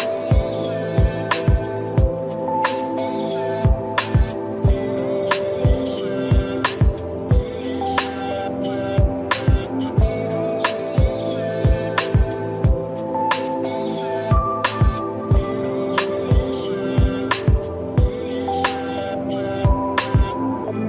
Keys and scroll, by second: 6.7 ctrl+=, 6.9 ctrl+-.